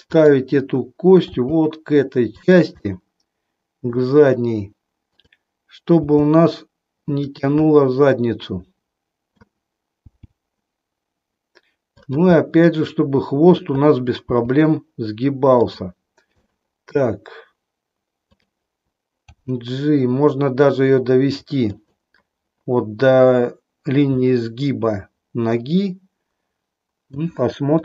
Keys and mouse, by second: 0.0 click, 1.4 g, 2.7-4.0 middle drag, 5.1 click, 6.0 g, 7.7-9.4 middle drag, 10.0 g, 11.9 click, 12.4-13.6 middle drag, 14.2 g, 16.5 middle click, 18.2 click, 19.1 g, 21.7 click, 24.2-27.2 middle drag, 27.7 click.